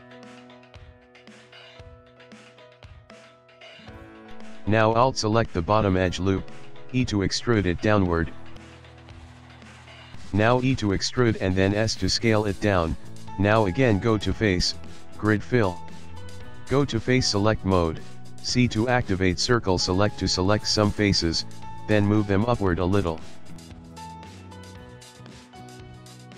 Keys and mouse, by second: 0.0 shift+middle click, 0.1 middle click, 1.3 KP_1, 2.5 a, 2.6 a, 3.9 alt+click, 5.4 alt+click, 5.6 alt+click, 6.7 e, 9.3 middle click, 10.0 ctrl+middle click, 10.8 e, 12.2 e, 13.3 e, 14.8 click, 17.9 click, 18.5 c, 22.0 g, 24.7 middle click.